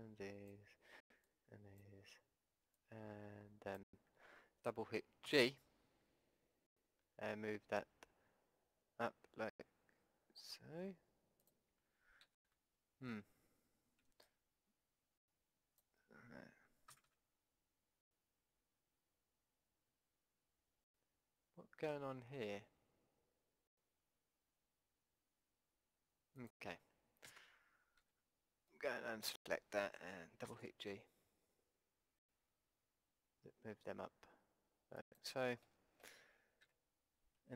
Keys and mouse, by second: 0.8 b, 2.0 b, 5.3 g, 12.3 ctrl+z, 14.0 b, 16.9 g, 27.3 ctrl+z, 28.0 b, 30.5 g, 35.6-37.4 middle drag, 36.6 a, 37.4 b.